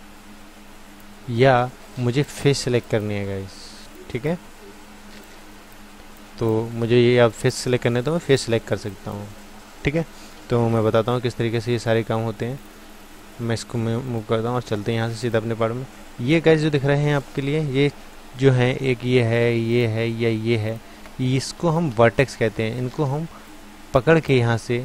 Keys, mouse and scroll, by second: 15.2-16.7 drag, 16.7-19.7 middle drag, 19.7-24.3 drag, 24.3-24.8 middle drag.